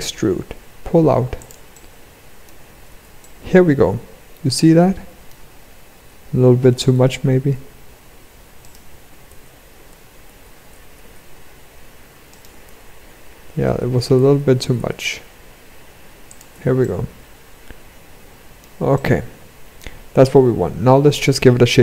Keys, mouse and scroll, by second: 1.2 middle click, 2.4 Tab, 2.7 middle click, 5.1-5.4 scroll up 2, 5.6 Tab, 6.2 g, 8.8 ctrl+z, 10.2 Tab, 10.6 e, 12.2 ctrl+z, 12.5 ctrl+z, 13.0 ctrl+z, 13.4 ctrl+z, 14.2 e, 16.0 Tab, 16.3 middle click, 18.5 middle click.